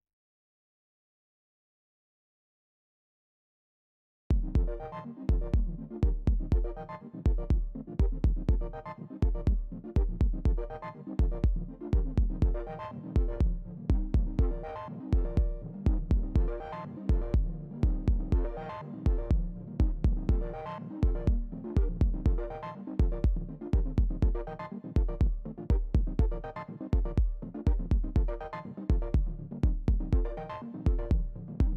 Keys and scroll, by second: 16.6 space, 22.0 space, 25.0 space.